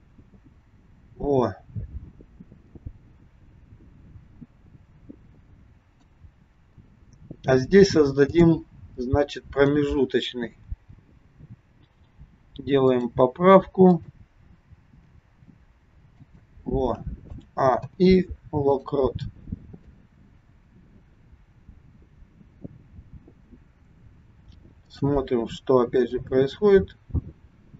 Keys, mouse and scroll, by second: 8.3 click, 9.5 click, 10.8 g, 13.8 click, 14.9 g, 17.3 a, 17.9 i, 19.9 click, 24.8 click, 26.2 click.